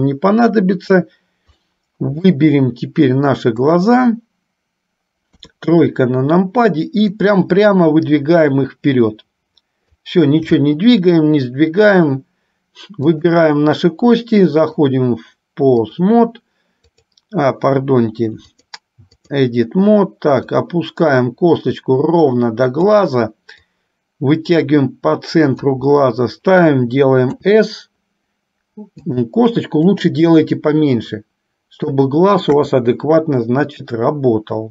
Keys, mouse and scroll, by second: 1.8 middle click, 3.8 click, 5.4 KP_3, 7.3-10.3 drag, 10.8 shift+middle click, 13.3 click, 14.9-16.3 drag, 16.9 click, 18.6-19.6 drag, 20.6-23.0 drag, 23.6-25.8 drag, 27.4 s, 29.9 click, 30.1-32.0 drag, 32.5 KP_1.